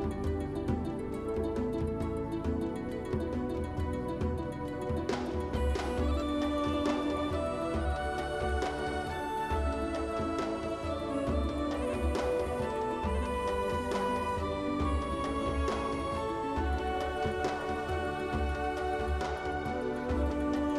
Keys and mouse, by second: 2.6 alt+shift+click, 4.2 shift+middle click, 4.6 middle click, 5.0 shift+middle click, 5.4 middle click, 10.1 click, 11.0 click, 19.9 click.